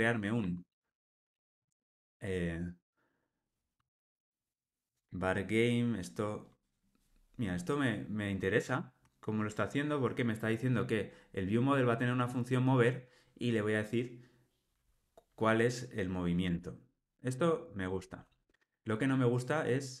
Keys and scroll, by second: 16.5 Tab.